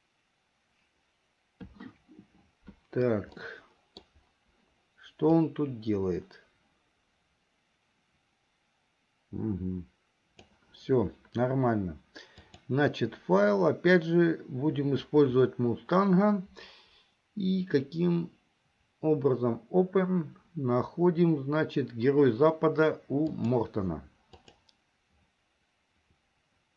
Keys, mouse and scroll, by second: 3.7 middle click, 5.6-10.7 drag, 12.4-26.5 drag.